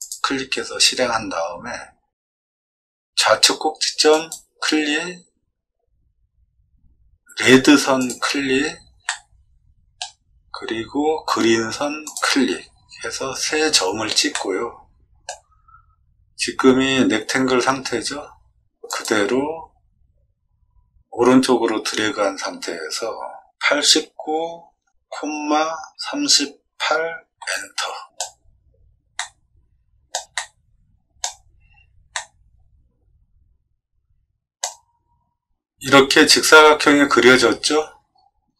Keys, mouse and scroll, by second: 0.0 click, 1.4 scroll down 2, 4.1 click, 7.9 click, 9.0 middle click, 12.0 click, 14.3 middle click, 23.5 8, 23.8 9, 25.0 ,, 25.9 3, 26.8 8, 27.3 Return, 28.0 scroll up 2, 29.1 middle click, 30.3 shift+middle click, 32.1-34.5 middle drag, 38.0 middle click, 38.4 middle click.